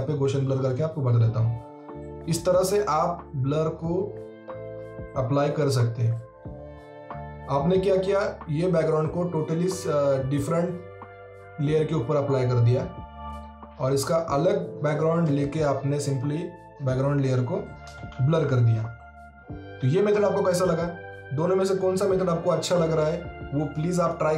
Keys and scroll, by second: 14.7 ctrl+z, 17.9 ctrl+z.